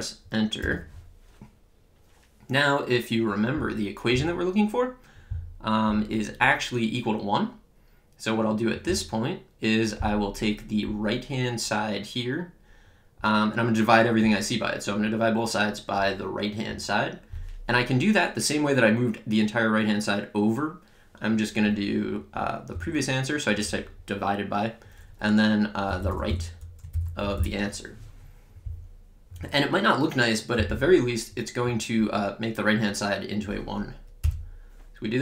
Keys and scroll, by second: 9.9 Return, 22.8 /, 25.7-27.9 typing, 34.2 Return.